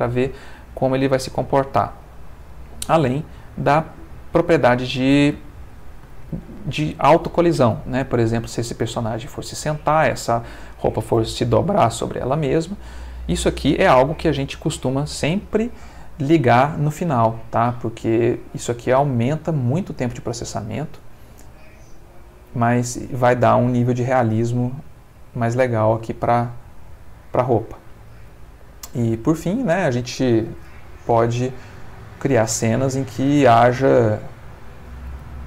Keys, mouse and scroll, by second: 2.1 middle click, 3.0 click, 7.8 middle click, 11.3 space, 27.6 Escape, 28.4 ctrl+middle click, 29.3 ctrl+middle click, 30.4 shift+a, 33.3 click, 34.6 click, 35.2 g.